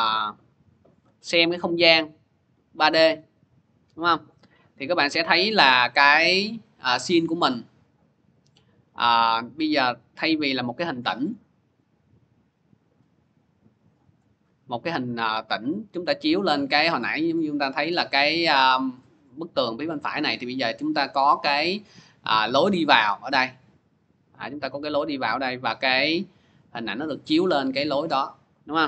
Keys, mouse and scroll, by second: 0.0 c, 13.9-19.0 drag.